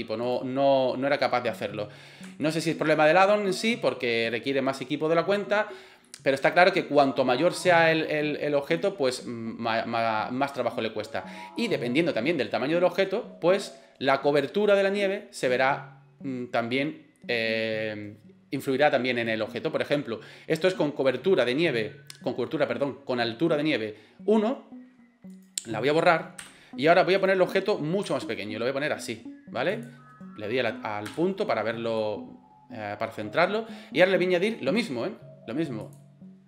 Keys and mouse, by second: 0.3 right click, 1.2 middle click, 2.4 shift+middle drag, 2.9 middle click, 6.1-8.8 middle drag, 11.6-12.0 middle drag, 20.7 middle click, 25.4 right click, 26.4 Delete, 27.2 right click, 28.0 s, 31.1 KP_Decimal, 32.0-33.1 middle drag, 35.8 click.